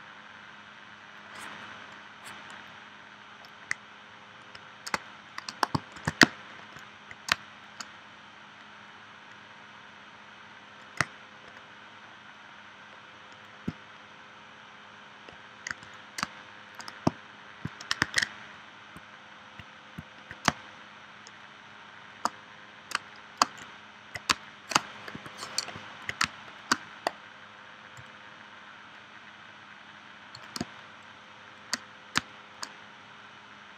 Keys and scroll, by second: 4.9 space, 5.9 shift+c, 7.3 space, 15.7 v, 16.2 space, 18.0 super+s, 20.5 space, 22.9 space, 24.3 space, 25.1 p, 26.2 space, 30.6 space, 32.2 space.